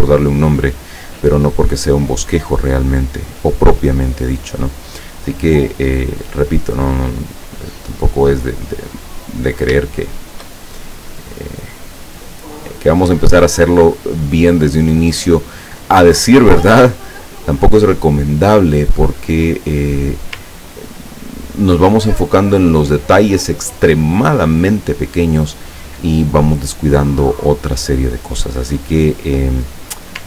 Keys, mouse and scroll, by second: 1.1 click, 3.0 click, 5.9 click, 7.1 click, 8.1-9.5 drag, 10.2 shift+click, 11.5-12.9 drag, 15.3 click, 16.7-20.2 drag, 20.7-21.2 ctrl+scroll down 1, 21.2 ctrl+scroll down 2.